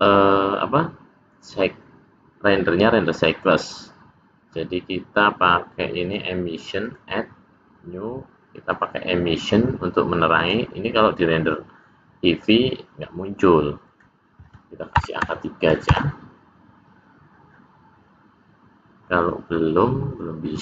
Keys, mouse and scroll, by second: 6.0 click, 6.8 click, 8.8 click, 13.9 click.